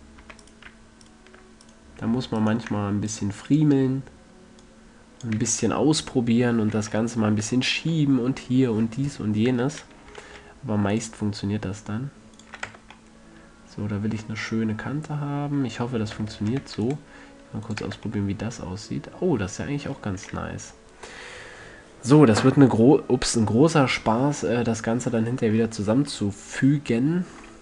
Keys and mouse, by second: 3.4-5.1 middle drag, 5.1-5.7 drag, 5.7 a, 6.5 middle click, 7.0 a, 7.3 middle click, 7.6 middle click, 7.7 Tab, 10.0 Tab, 10.6 ctrl+r, 12.8-13.3 drag, 12.9 a, 13.0 Tab, 13.9-14.3 middle drag, 14.5 middle click, 16.4 Tab, 16.9 ctrl+r, 18.1-18.6 drag, 18.2 Tab, 22.1-23.2 middle drag.